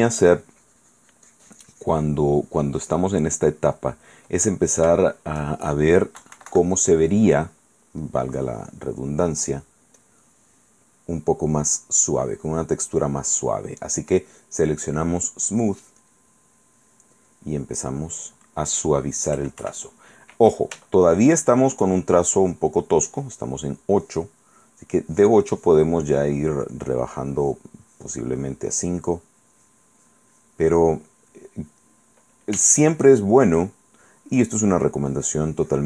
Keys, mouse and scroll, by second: 3.9 click, 5.2 shift+click, 6.4 KP_Subtract, 7.1-8.2 drag, 8.9 right click, 9.6 click, 10.2 click, 16.2 click, 19.6 KP_Add, 21.1 shift+middle click, 25.2-26.6 drag, 26.7 middle click, 26.7 click, 27.2 middle click, 27.5 click, 28.0 click, 28.6 middle click, 29.7 click, 30.2 click, 30.9 click, 30.9 middle click, 30.9 right click, 32.0 click, 32.8 shift+click, 33.9 shift+click, 34.9-35.8 drag.